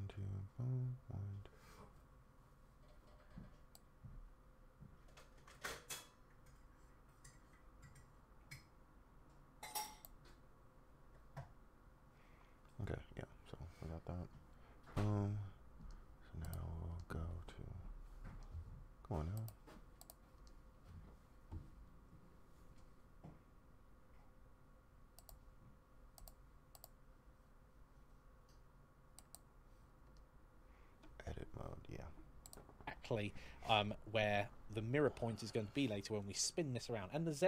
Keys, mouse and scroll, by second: 37.1 click.